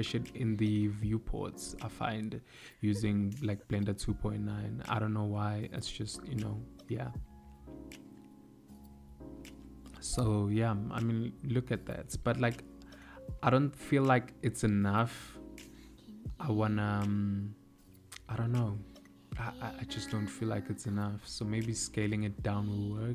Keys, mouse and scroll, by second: 0.7 click, 2.0 click, 2.5 click, 15.7 click, 19.2 click, 20.4 s.